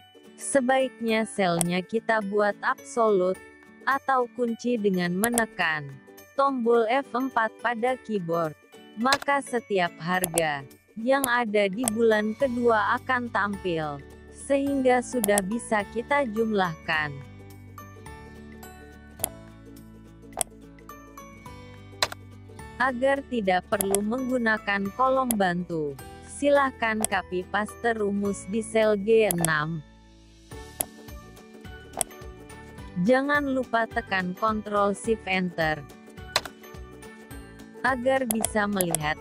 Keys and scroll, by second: 3.9 F4, 27.1 ctrl+c, 30.8 ctrl+v, 34.7 ctrl+shift+Return.